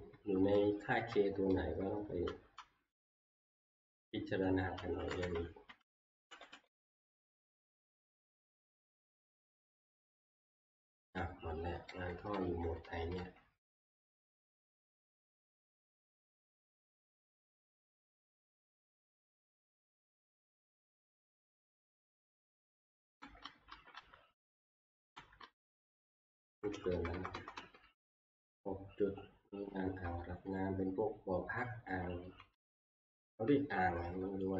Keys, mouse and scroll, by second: 0.1 Left, 0.5 Left, 1.1 Left, 1.5 Left, 3.4 Up, 3.4 click, 4.3 click, 4.4 click, 5.7 shift+Page_Up, 5.9 shift+Page_Up, 6.2 shift+Page_Up, 6.5 shift+Page_Up, 6.7 shift+Page_Up, 8.0 Page_Up, 8.3 Page_Up, 8.6 Page_Up, 9.0 Page_Up, 11.9 Page_Down, 12.3 Page_Down, 12.8 Page_Down, 13.2 Page_Down, 13.6 Page_Down, 17.8 click, 19.7 click, 20.9 click, 21.5 Right, 22.4 Right, 22.7 Right, 23.0 Right, 23.2 Right, 23.4 Right, 23.7 Right, 23.9 Right, 24.9 Right, 25.2 Right, 25.4 Right, 26.5 Left, 26.7 Left, 26.9 Left, 27.1 Left, 27.3 Left, 27.6 Left, 27.9 Left, 28.1 Left, 28.3 Left, 29.8 Left, 30.2 Left, 30.5 Left, 31.8 Left, 32.2 Left, 32.5 Left, 32.9 Left, 33.5 Left, 33.9 Left.